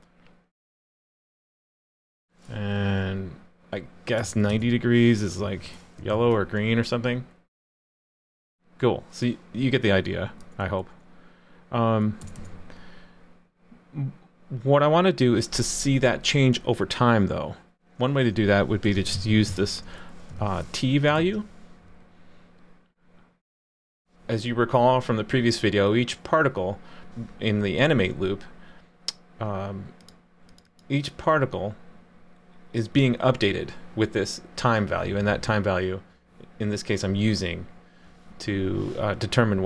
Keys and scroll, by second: 6.1 super+s, 21.1 super+s.